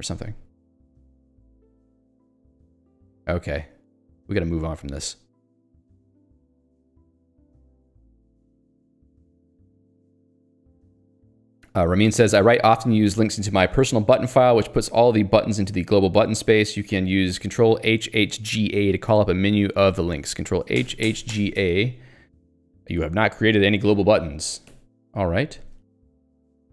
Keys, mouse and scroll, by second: 0.7 scroll down 1, 1.7 scroll up 1, 4.1 middle click, 9.6 middle click, 20.2 Escape, 21.3 g, 21.6 a, 24.7 click, 25.6 j, 26.5 ctrl+g.